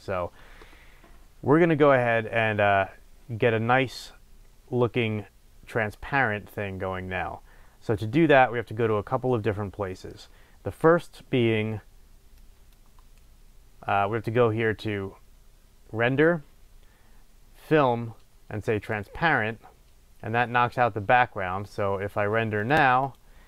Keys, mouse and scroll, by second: 0.0-9.3 drag, 9.3-12.3 middle drag, 12.3 click, 17.7-18.0 drag, 22.7 click.